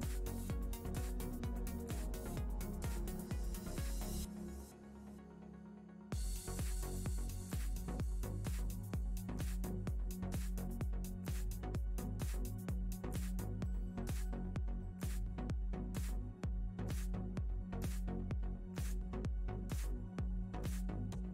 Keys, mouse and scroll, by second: 1.6 middle click, 2.7 shift+middle click, 3.5 click, 5.4 click, 7.1 click, 8.1 shift+d, 9.8 shift+click, 10.8 shift+middle click, 11.8 click, 12.3 click, 14.3 click, 14.9 shift+middle click, 15.8 click, 16.3 shift+a.